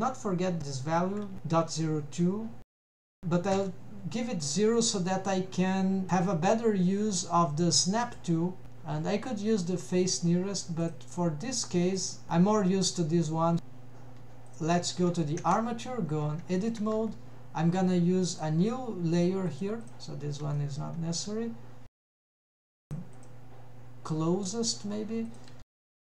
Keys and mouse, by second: 0.8-3.6 drag, 4.5-4.8 middle drag, 5.1-6.1 middle drag, 8.1 click, 8.6-11.7 drag, 12.0 drag, 12.3 n, 12.5 n, 14.5 click, 14.9 click, 15.5 Tab, 16.6 shift+middle drag, 17.0 n, 18.4-19.7 drag, 19.9 click, 20.6 shift+middle click, 22.2 shift+a, 23.3-25.1 drag, 25.3 click, 25.7 g.